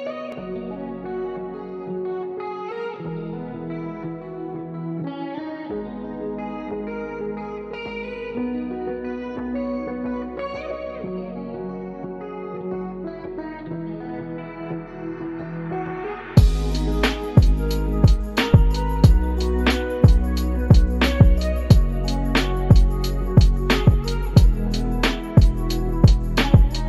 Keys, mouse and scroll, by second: 1.1 shift+a, 7.1-7.7 middle drag, 8.2 s, 14.7 s, 16.0 s, 18.3 middle click, 20.8 click, 21.5-25.0 drag.